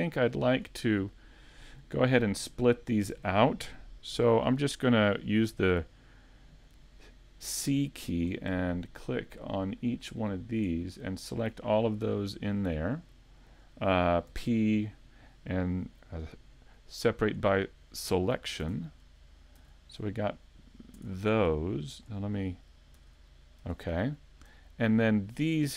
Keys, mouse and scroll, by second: 0.6-1.1 scroll up 2, 1.2 shift+middle click, 1.2 scroll up 1, 2.2 middle click, 2.8 shift+middle click, 4.1 c, 11.0 right click, 11.3 scroll down 2, 11.7 middle click, 12.8 shift+middle click, 14.3 p, 20.1 right click, 21.0 Tab, 21.4 right click, 23.0 Tab, 23.9 scroll up 1, 24.6 scroll down 2, 24.7 scroll down 1, 25.4 right click.